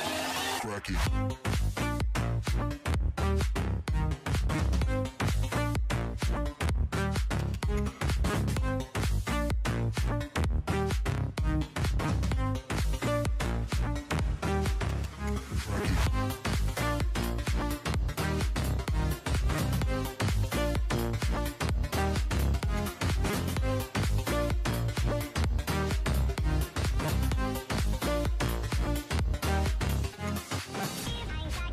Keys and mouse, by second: 0.5 KP_Decimal, 1.2 z, 2.3 a, 2.8-4.8 middle drag, 4.8 a, 4.9 a, 6.2 l, 7.4 l, 7.6 l, 7.7 middle click, 8.2 shift+h, 10.1 p, 10.5 Tab, 11.0-11.3 right drag, 11.8-13.4 typing, 12.7 Tab, 13.8 Delete, 15.1-15.6 a, 15.6 b, 16.7 Delete, 17.3 b, 17.7 Delete, 18.5-18.9 drag, 18.7-23.4 typing, 19.5-20.0 drag, 20.6 Delete, 23.1 Tab, 25.9 Tab, 26.2 a, 27.8 z, 28.1 Delete, 29.1 a, 29.1 a, 30.3 a, 30.4 a, 30.8 k.